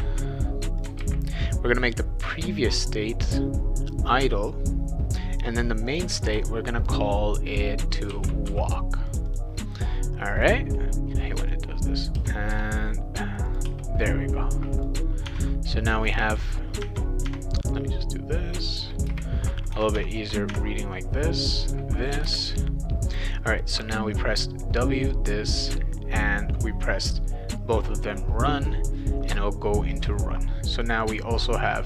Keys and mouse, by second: 0.0 ctrl+c, 0.8 click, 1.0 ctrl+v, 5.9 click, 6.0 click, 8.1 shift+w, 8.5 a, 9.1 click, 9.3 click, 10.5 click, 11.0 click, 11.5 click, 12.1 BackSpace, 12.5 BackSpace, 13.5 click, 13.6 space, 14.7 click, 15.2 Tab, 16.8 Tab, 17.2 Tab, 18.5 click, 19.1 Return, 19.7 Tab, 19.9 Tab, 20.5 Tab, 21.6 click, 22.2 Return, 31.0 click.